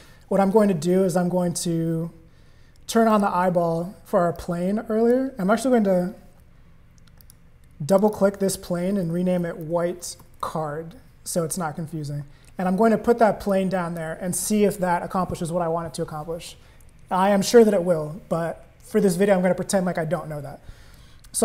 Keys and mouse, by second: 3.1 click, 4.3 click, 7.2 click, 7.9 click, 8.1-11.1 drag, 13.5 click.